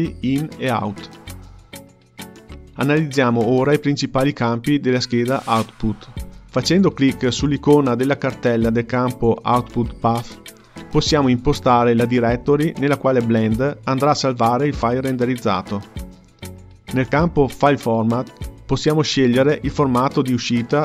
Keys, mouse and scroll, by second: 5.0-8.2 drag.